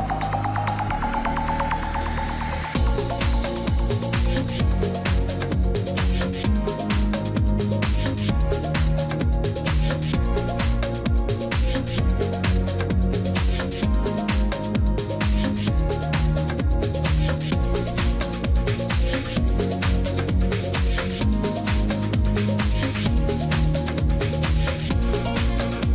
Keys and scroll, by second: 24.6 ctrl+j, 25.0 ctrl+t.